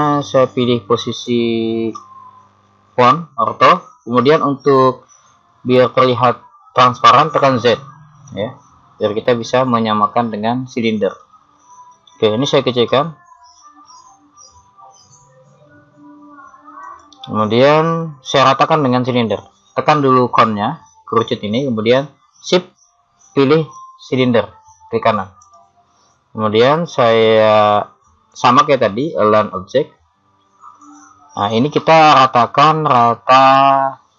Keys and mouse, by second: 1.9 KP_1, 7.7 z, 10.9-12.2 middle drag, 12.9 s, 25.4-27.2 right drag.